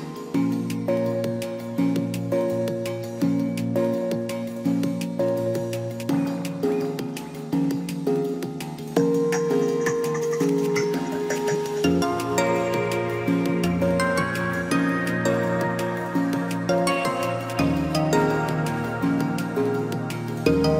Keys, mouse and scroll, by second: 0.5 ctrl+d, 9.3 ctrl+d.